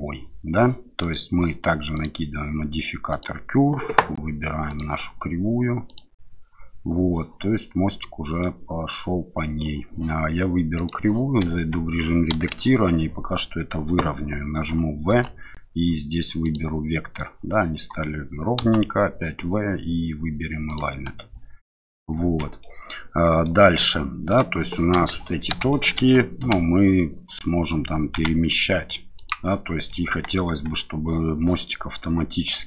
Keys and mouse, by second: 1.0 click, 2.1-3.2 drag, 4.6 click, 8.4-9.6 middle drag, 10.8 click, 11.5 Tab, 12.3 KP_7, 15.1 v, 18.6 v, 22.2 Tab, 22.6 middle click, 23.6 Tab, 24.3 click, 24.9 KP_7, 25.7 shift+middle click, 26.4 g, 28.1 x, 29.1 click, 29.9 middle click, 30.5 Tab, 31.6-32.0 middle drag.